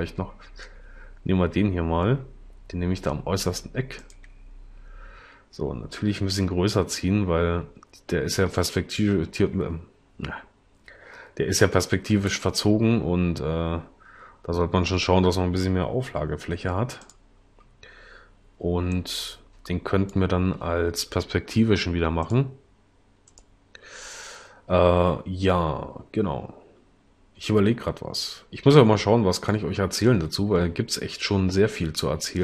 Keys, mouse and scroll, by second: 6.5 s, 16.6 s.